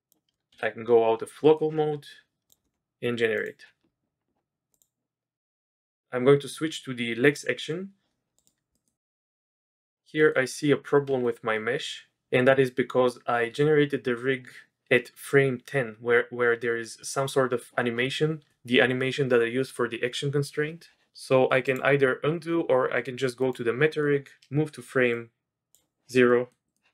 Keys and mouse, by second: 0.0 click, 1.4 middle click, 3.3 click, 4.8-8.5 drag, 8.7 click, 9.0 click, 9.2-9.8 drag, 10.2 click, 11.0 z, 11.5-12.1 drag, 21.6 click, 23.5 click, 23.9 middle click, 25.1-25.7 drag, 26.3 middle click, 26.6 click.